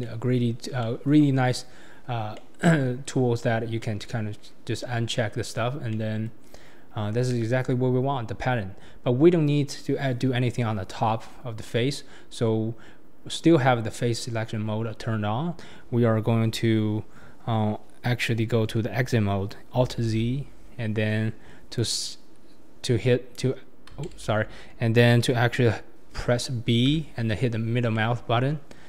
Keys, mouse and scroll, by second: 2.3 middle click, 21.7 click, 24.1 ctrl+z, 26.9 b.